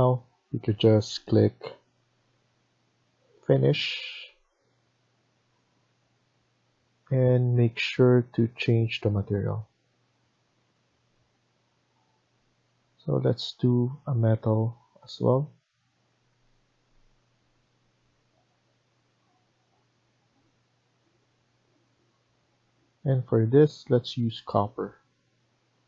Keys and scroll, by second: 25.7 Escape.